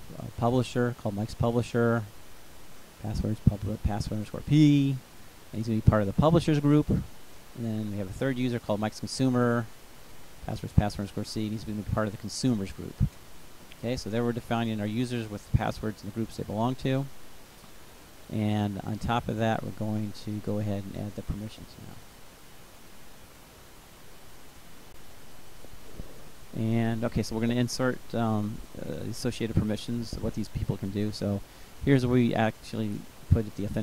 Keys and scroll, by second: 24.7 ctrl+c, 27.2 ctrl+v.